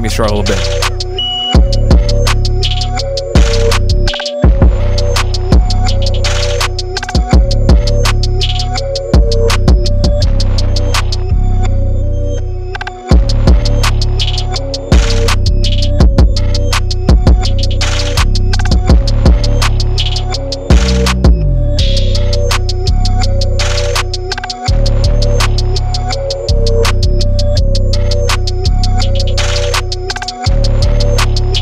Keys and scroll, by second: 1.0 Return, 1.2 super+-, 1.3 super+-, 1.3 super+0, 1.6 u, 1.8 super+t, 2.4 Return, 4.5-8.7 typing, 8.9 Page_Down, 8.9 shift+Page_Up, 9.1 alt+End, 9.1 alt+End, 9.2 alt+End, 9.5 alt+Home, 9.6 alt+Left, 9.7 alt+Home, 9.8 alt+Home, 9.9 alt+End, 10.5-11.8 typing, 12.2 alt+Right, 12.3 alt+Left, 12.5 alt+Left, 12.7 alt+Right, 12.8 alt+Right, 13.0 alt+Left, 13.3 u, 13.5 super+t, 13.8 Return, 15.2 space, 15.4 Left, 15.5 Left, 15.7 BackSpace, 16.0 alt+Right, 16.1 alt+Right, 16.2 alt+Right, 17.1 BackSpace, 17.2 alt+Right, 17.6 alt+Right, 18.8 alt+Right, 18.9 alt+Right, 19.3 alt+Left, 19.7 super+t, 20.3 Return, 20.3 v, 20.4 super+-, 20.5 super+-, 20.5 super+0, 20.5 super+-, 22.3 BackSpace, 22.4 super+0, 22.6 super+-, 22.7 t, 23.9-25.2 typing, 25.2 super+a, 25.5 super+d, 25.5 super+t, 26.3 Return, 26.4 super+a, 26.6 super+d, 28.3 super+-, 28.5 super+-, 28.5 super+0, 28.6 super+=, 29.2 super+a, 29.4 super+d, 29.9 shift+super+-, 30.2 super+0, 31.0-31.6 typing.